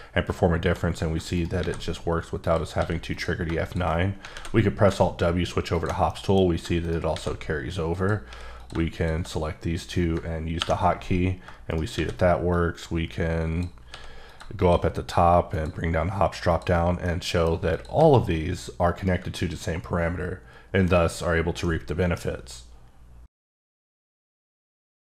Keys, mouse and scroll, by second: 1.3 right click, 1.6 a, 2.4 click, 2.7 s, 3.1 click, 3.6 shift+click, 4.3 alt+w, 5.7 ctrl+click, 6.0 middle click, 6.8 shift+right click, 7.1 shift+a, 7.9 click, 8.2 s, 8.6 click, 10.6 KP_Subtract, 11.7 shift+right click, 11.9 shift+a, 12.5 click, 13.9 s, 14.2 click, 14.6 click, 15.5 click, 16.5 click, 17.1 middle click, 17.7 click, 17.9 g, 19.0 right click, 19.3 middle click, 21.6 middle click.